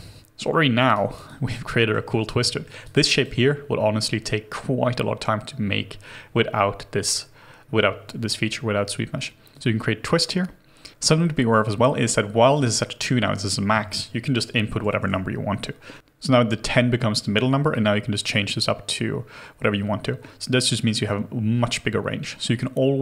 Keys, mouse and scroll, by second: 0.9 alt+right click, 1.3 alt+click, 1.7 alt+middle click, 2.5 alt+middle click, 2.9 alt+click, 12.6 double click, 14.7 1, 14.9 0, 15.0 Return.